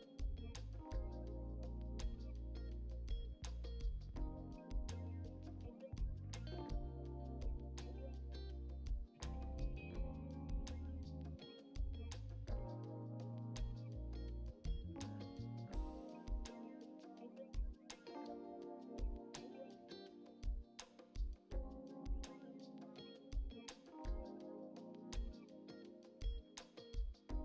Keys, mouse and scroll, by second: 0.3 scroll down 2, 0.3 shift+middle click, 1.1 shift+d, 2.5 middle click, 2.7 scroll down 1, 2.8-7.9 typing, 3.5 middle click, 4.5 middle click, 6.7 middle click, 9.5-10.2 scroll down 2, 10.4 scroll up 3, 10.5 scroll down 1, 10.6 shift+middle click, 11.1 KP_1, 11.6 shift+middle click, 12.1 scroll up 1, 12.2 shift+middle click, 12.8 r, 17.4 middle click, 17.8 click, 18.3 Delete, 18.5 click, 18.6 Delete, 19.3 middle click, 19.4 scroll up 3, 19.5 middle click, 19.9 click, 20.6 alt+click, 20.7 alt+click, 21.5 shift+click, 22.4 shift+click, 22.5 shift+click, 22.8 shift+click, 22.9 shift+click, 23.4 shift+click, 24.1 shift+click, 24.3 Delete, 24.7 scroll down 1, 24.8 middle click, 25.3 click, 26.0 middle click, 26.3 alt+shift+click, 26.7 alt+shift+click, 27.0 alt+shift+click.